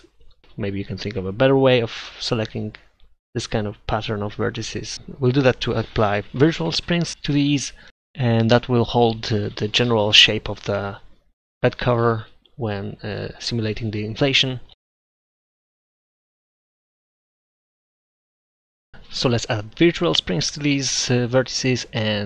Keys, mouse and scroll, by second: 0.2 ctrl+z, 1.1-2.2 right drag, 1.3 ctrl+z, 1.4 ctrl+z, 2.8 click, 3.5-5.0 drag, 5.0 middle click, 6.2 ctrl+z, 6.6 ctrl+z, 6.8 ctrl+z, 7.4 ctrl+z, 9.5-10.9 right drag, 11.3-12.5 right drag, 12.5 ctrl+z, 12.7 ctrl+z, 12.9 ctrl+z, 12.9 ctrl+z, 13.9-15.2 right drag, 15.4-17.1 middle drag, 21.1 click.